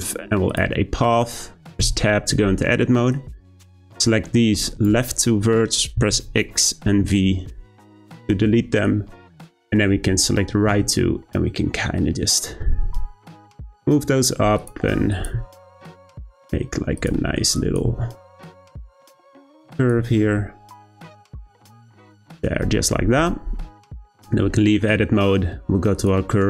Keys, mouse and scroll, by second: 1.8 Tab, 3.1 click, 6.0 x, 8.8 click, 10.7 g, 15.1 click, 15.3 g, 17.5 click, 17.8 g, 19.7 click, 20.0 g, 22.6 Tab, 25.9 click.